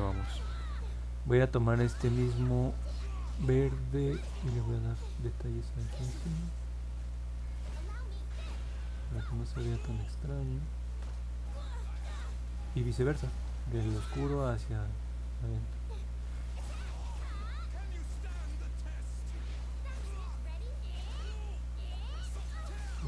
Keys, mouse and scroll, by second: 5.0 click, 5.5 click, 6.0 click, 6.5 click, 7.0 click, 7.7 click, 8.2 click, 8.7 click, 9.4 click, 9.8 click, 10.3 click, 10.8 click, 11.1 click, 11.6 click, 12.1 click, 12.6 click, 13.2 click, 13.7 click, 14.2 click, 14.7 click, 15.2 click, 15.7 click, 16.0 click, 16.5 click, 17.0 click, 17.3 click, 17.7 click, 18.5 click, 19.1 click, 19.6 click, 20.1 click, 20.6 click, 21.2 click, 21.7 click, 22.1 click, 22.6 click.